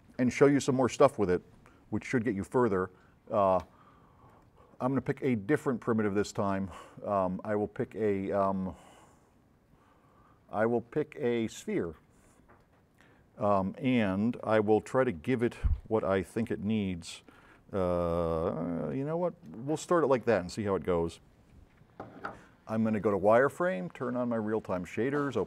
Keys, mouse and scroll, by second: 4.4-4.8 drag, 11.8 click, 13.6-15.0 drag, 16.0-17.4 drag, 23.2 click, 24.9 click.